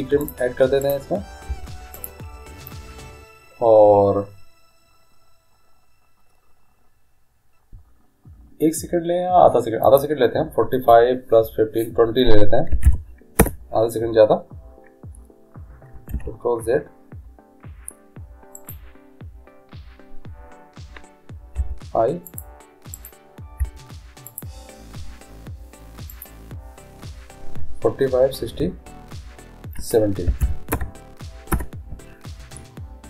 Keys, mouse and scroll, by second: 0.5 i, 1.0-2.9 right drag, 1.7 i, 10.0-12.0 drag, 16.4 ctrl+z, 18.8-20.6 right drag, 21.8 i, 23.1-25.0 right drag, 23.8 i, 26.3-28.3 drag, 31.7 Return.